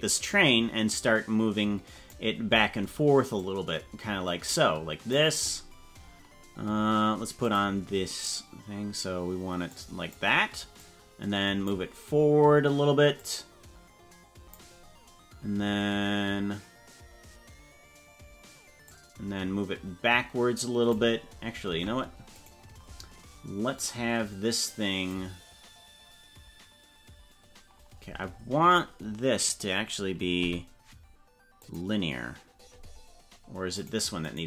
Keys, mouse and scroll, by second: 3.3-5.1 drag, 7.5 click, 9.7 click, 10.9 click, 13.1-14.5 drag, 19.0-21.0 drag, 21.8 ctrl+Tab, 22.4 right click, 23.7-25.2 drag, 29.4 right click, 30.4 t, 34.2 right click.